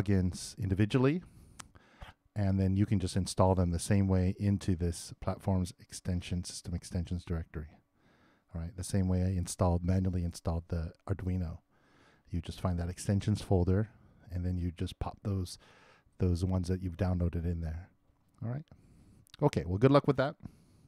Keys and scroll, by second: 6.9 super+Return.